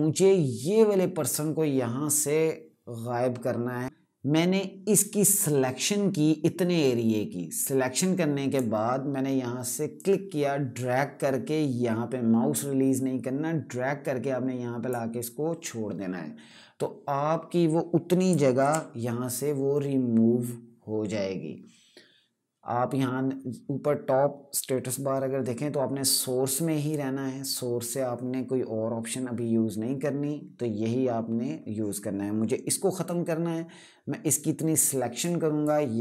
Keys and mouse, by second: 3.8 d, 4.6 click, 18.3 d, 32.7 click.